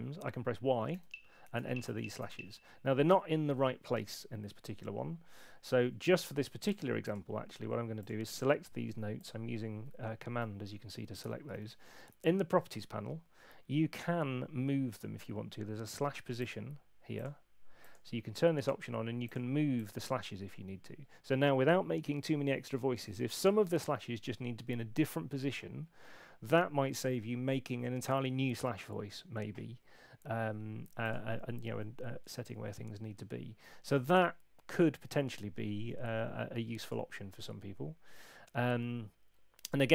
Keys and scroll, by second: 0.9 y, 3.1 Home, 11.5 super+8.